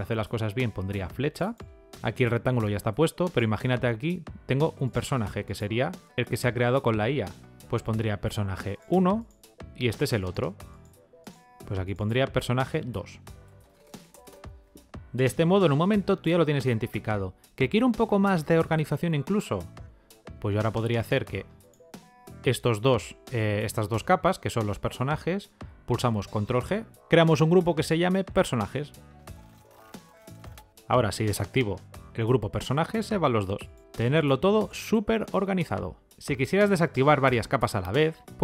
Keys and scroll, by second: 26.2 ctrl+g.